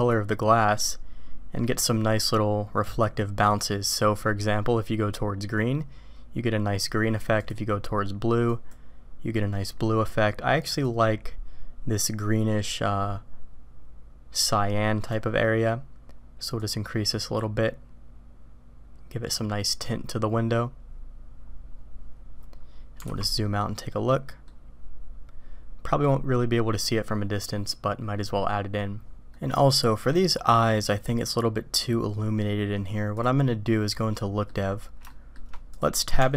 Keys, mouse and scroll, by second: 7.4 drag, 22.2 middle click, 23.1 alt+a, 23.4-24.5 drag, 27.5 middle click, 29.3-30.1 drag, 29.3-30.1 middle drag, 33.5 click, 34.2-34.5 middle drag, 35.1 shift+middle click, 35.7 click, 36.2 Tab.